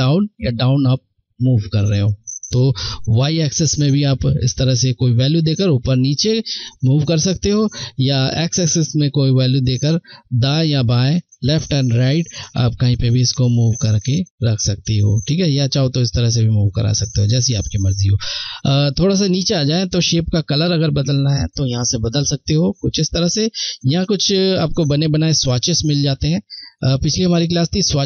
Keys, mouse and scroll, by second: 15.0 Left, 15.0 click, 21.2 click, 22.6 click.